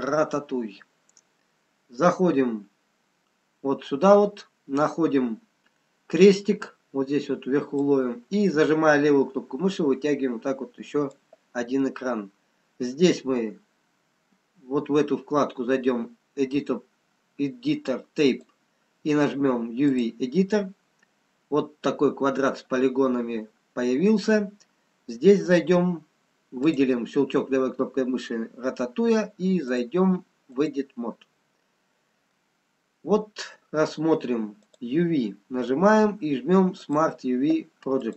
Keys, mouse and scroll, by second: 8.4 click, 18.3 click, 21.3-23.8 scroll up 2, 25.4 click, 30.0 click, 32.2 middle click, 34.5 click.